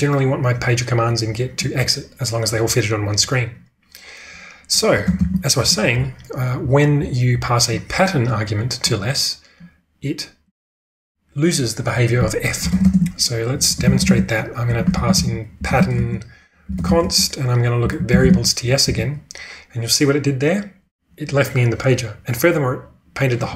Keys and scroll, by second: 5.1 ctrl+space, 12.7 ctrl+space, 13.3-16.2 typing, 20.7-21.4 typing.